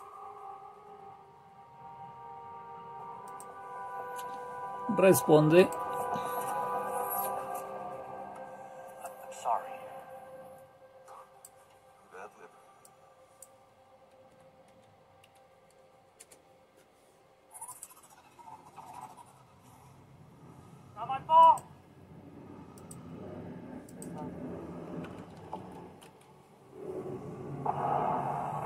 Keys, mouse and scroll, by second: 3.3 click, 5.6 click, 9.1-12.0 drag, 12.3 click, 12.9-14.1 drag, 14.1-15.2 typing, 16.2 Return, 16.9 typing, 17.9 click, 19.4-20.4 typing, 21.7 click, 22.9 click, 23.5 click, 24.1 click, 25.2-28.0 typing.